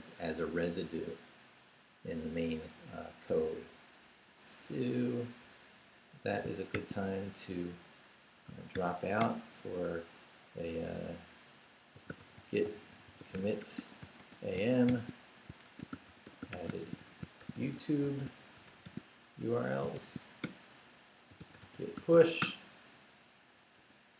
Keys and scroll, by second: 6.7 shift+;, 8.5 s, 8.7 h, 9.2 Return, 11.7-20.0 typing, 20.4 shift+Return, 21.1-24.1 typing.